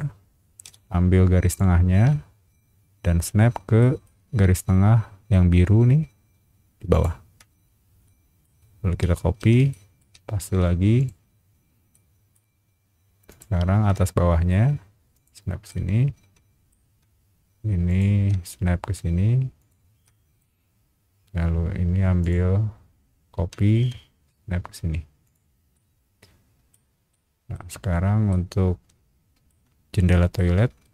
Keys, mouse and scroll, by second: 0.6 m, 1.4 click, 3.8 shift+middle click, 4.2-5.1 shift+scroll up 3, 6.9 shift+click, 7.3-7.8 scroll down 2, 8.0 shift+middle click, 8.6 scroll down 1, 9.4 ctrl+c, 9.7 middle click, 10.4 ctrl+v, 11.0 click, 11.9 middle click, 13.3 click, 15.1 shift+click, 15.7-16.7 shift+middle drag, 17.9 shift+click, 19.6 shift+click, 20.0 shift+middle click, 22.2 shift+click, 25.2 shift+click, 25.7 shift+middle click, 27.1 shift+middle click, 28.3-29.5 shift+middle drag, 30.0 shift+middle click, 30.5 r.